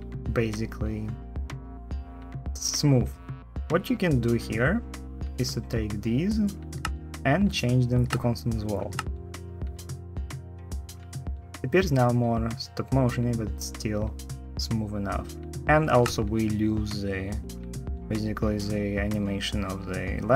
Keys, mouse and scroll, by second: 6.6 shift+t, 8.7 space, 15.7 space.